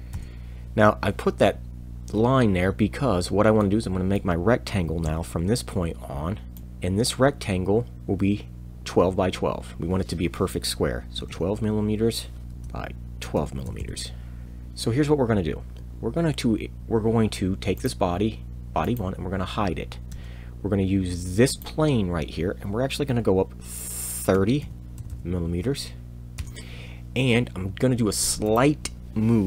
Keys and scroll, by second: 0.1 Return, 5.0 r, 11.2 1, 11.3 2, 12.4 m, 12.4 2, 12.5 Tab, 13.3 1, 13.4 2, 14.4 Return, 14.4 z, 20.1 e, 24.3 3, 24.6 o, 25.0 m.